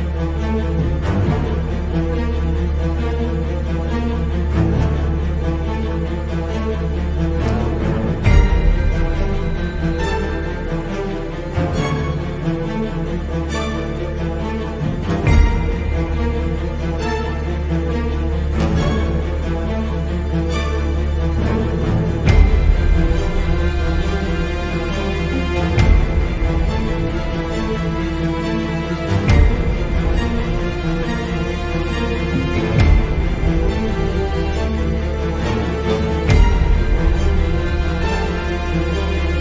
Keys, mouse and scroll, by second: 4.0 click, 5.7-7.9 drag, 9.2 middle click, 11.5 click, 12.9 Delete, 14.8 click, 17.7-20.1 drag, 22.3 click, 23.4 click, 26.2 click, 27.2 click, 30.8 click, 31.9-32.5 middle drag, 32.9 drag, 34.7 click, 35.6 click, 36.6-37.0 drag, 38.5 click.